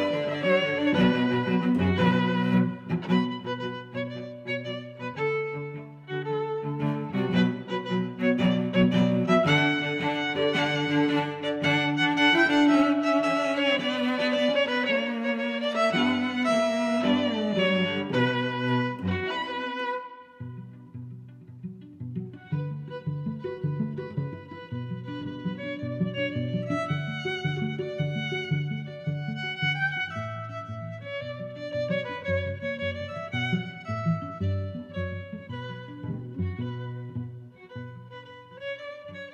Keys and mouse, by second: 0.1 click, 0.9 click, 1.2 click, 1.7 click, 2.7 g, 2.9 y, 4.2 click, 4.7 middle click, 6.0 Tab, 6.7 click, 7.3 click, 8.5 click, 8.8 click, 10.3 click, 12.7 Tab, 13.2 a, 13.9 click, 14.5 click, 15.4 g, 15.8 z, 17.2 click, 17.6 Tab, 18.0 click, 18.7 middle click, 21.0 middle click, 21.9 click, 22.1 Tab, 22.9 click, 23.4 click, 24.2 g, 24.5 y, 25.0 click, 25.4 z, 26.2 click, 27.0 g, 27.2 y, 29.3 click, 29.9 Tab, 30.2 click, 30.4 Tab, 31.3 g, 31.4 z, 32.5 click, 33.3 g, 33.5 y, 34.6 click, 34.9 middle click, 35.3 Tab, 35.6 click, 35.8 middle click, 37.9 click, 38.2 Tab, 38.8 middle click.